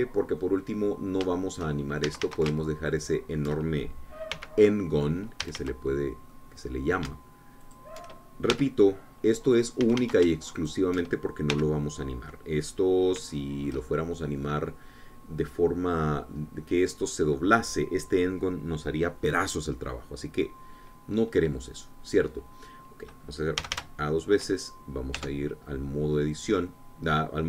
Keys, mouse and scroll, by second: 0.6 f, 1.4 click, 2.4 shift+click, 2.4 shift+scroll down 2, 3.1 shift+a, 3.9 alt+shift+click, 5.4 f, 5.8 click, 6.5 a, 7.0 click, 8.8 alt+shift+click, 9.6 shift+f, 9.9 click, 10.9 a, 11.7 alt+shift+click, 12.6 f, 12.9 click, 13.7 middle click, 14.4 shift+middle click, 14.9-15.4 shift+scroll down 1, 15.4-17.6 middle drag, 20.9-21.5 scroll down 1, 21.5-22.6 middle drag, 24.7 a, 26.2 Tab, 26.9-27.3 scroll down 2, 27.3-27.4 drag.